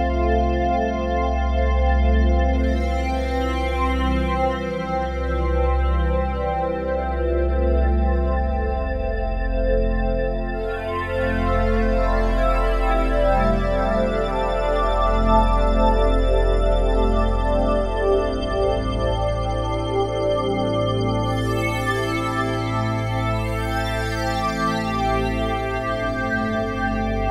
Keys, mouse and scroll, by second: 0.4-1.2 typing, 0.7 click, 2.5 ctrl+alt+drag, 3.0 alt+shift+click, 3.4 ctrl+alt+click, 5.3 typing, 7.3-8.7 shift+drag, 8.7 typing, 10.2-10.9 drag, 10.9 typing, 12.8-26.8 drag, 23.1-23.8 typing, 26.8 Left.